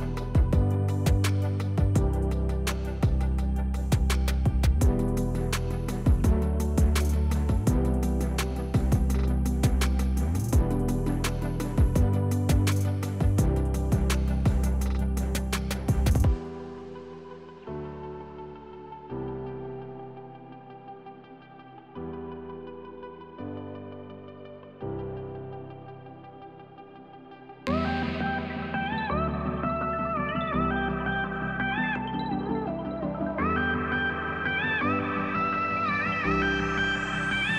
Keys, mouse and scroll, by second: 0.3 middle click, 0.9 click, 1.1 Delete, 2.0 middle click, 2.5 click, 2.8 Delete, 3.3 middle click, 4.2 click, 5.1 click, 5.6 click, 6.1 alt+click, 6.6 click, 7.7 alt+shift+click, 8.5 ctrl+alt+shift+click, 9.9 ctrl+b, 13.0 click, 13.1 middle click, 13.4 scroll up 1, 14.1-15.1 shift+middle drag, 15.1 e, 15.4 Escape, 15.7 s, 18.2 click, 19.0 click, 19.3 middle click, 20.0 click, 20.4 click, 20.9 shift+click, 21.2 shift+click, 21.5 shift+click, 21.7 shift+click, 22.0 shift+click, 22.3 shift+click, 22.5 shift+click, 22.8 shift+click, 23.1 shift+click, 23.3 shift+click, 23.5 shift+click, 24.0 shift+click, 24.5 shift+click, 24.8 shift+click, 25.3 shift+click, 25.6 middle click, 26.3 shift+click, 26.6 click, 27.0 shift+click, 27.2 shift+click, 27.4 shift+click, 27.7 shift+click, 27.9 shift+click, 29.0 shift+click, 29.2 shift+click, 29.4 shift+click, 29.7 shift+click, 30.0 shift+click, 30.3 shift+click, 30.8 Delete, 31.7 middle click, 32.5 click, 32.9 shift+click, 33.2 shift+click, 33.5 click, 33.7 click, 34.0 shift+click, 34.3 shift+click, 34.5 shift+click, 34.8-35.4 scroll down 2, 35.4 shift+click, 35.9 shift+click, 36.2 shift+click, 36.5 shift+click, 36.9 shift+click.